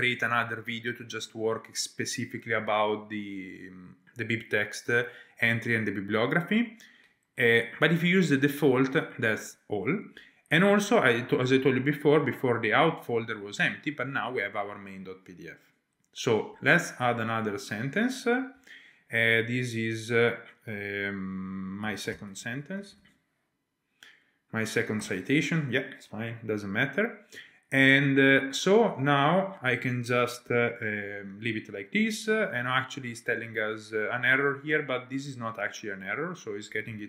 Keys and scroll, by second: 18.5-19.4 typing, 21.6-23.4 typing, 25.0 Tab, 30.2-30.9 typing.